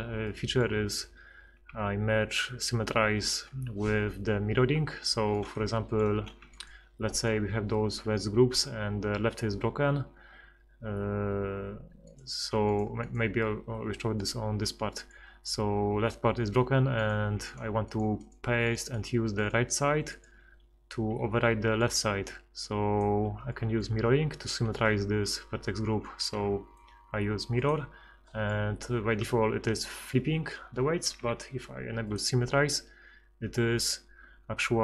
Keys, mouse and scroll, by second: 2.6 ctrl+x, 6.5-7.7 right drag, 21.5 b, 23.0 click, 26.2 ctrl+x, 31.2 F6.